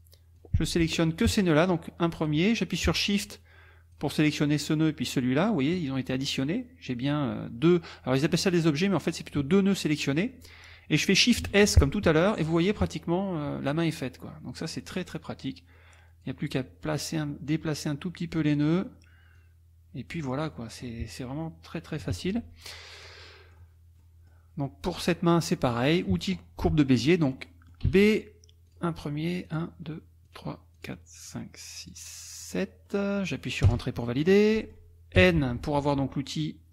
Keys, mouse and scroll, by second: 0.4 click, 1.7 click, 3.3 shift+click, 4.5 shift+click, 11.5 shift+s, 14.6 click, 15.5 click, 17.7-18.8 drag, 19.4 click, 20.5 middle click, 22.0 KP_Subtract, 22.7-23.7 drag, 24.0 click, 27.5 click, 27.9 b, 28.7 click, 29.4 click, 30.2 click, 30.7 click, 31.3 click, 31.8 click, 32.4 click, 32.9 middle click, 32.9 scroll up 1, 33.7 Return, 34.4-34.9 scroll up 1, 35.2 n, 35.5-36.0 scroll up 1, 36.4-36.7 drag.